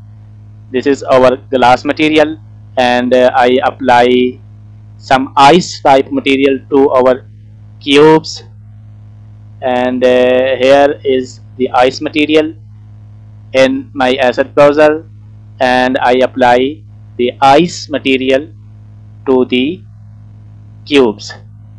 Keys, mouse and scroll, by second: 0.2 scroll down 1, 0.3 middle click, 1.2 scroll down 1, 1.4 shift+middle click, 3.6 middle click, 4.0 middle click, 4.5 shift+middle click, 6.0-6.5 scroll down 3, 6.9-9.7 scroll down 9, 9.7-10.1 scroll down 2, 10.1-11.0 scroll up 4, 11.0-12.3 scroll up 1, 13.3 click, 16.3 click, 19.3 click.